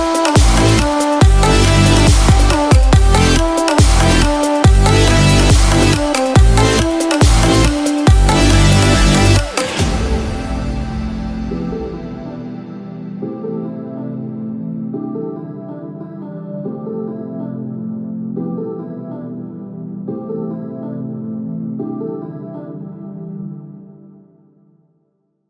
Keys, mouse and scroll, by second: 1.2 click, 1.2-1.6 scroll down 1, 5.4 middle click, 5.4 click, 5.4-5.7 scroll down 8, 12.9 click, 12.9-13.6 scroll down 2, 14.0 click, 16.5 click, 22.1-22.5 scroll up 3.